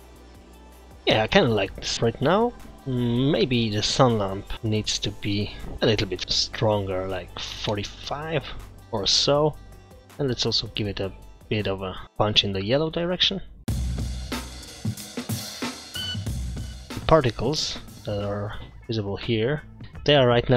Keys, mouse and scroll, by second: 4.5 scroll up 1, 4.5 click, 10.6 click.